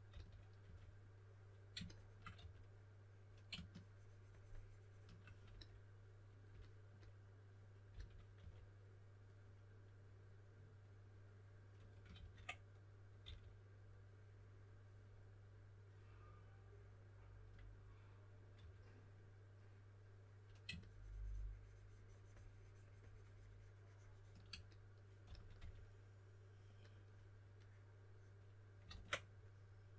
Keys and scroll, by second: 0.0-1.1 typing, 2.3 3, 7.6-8.8 typing, 12.1 super+z, 13.2 s, 18.3-19.0 typing, 25.0-26.0 typing, 28.8 super+z.